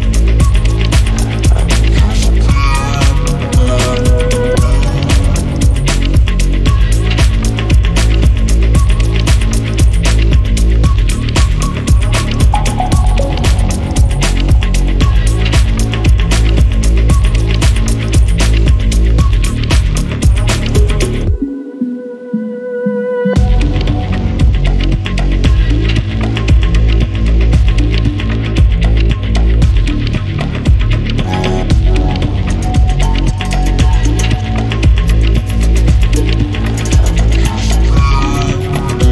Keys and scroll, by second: 3.8 Escape, 11.4-11.8 typing, 16.9 Escape, 18.0 Escape, 24.6 ctrl+c, 27.0 alt+Tab, 37.2 Escape.